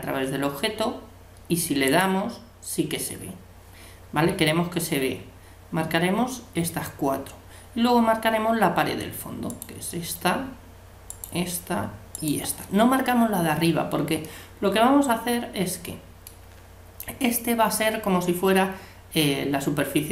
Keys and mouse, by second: 1.9-3.6 drag, 9.5-13.8 right drag, 14.2-16.0 middle drag.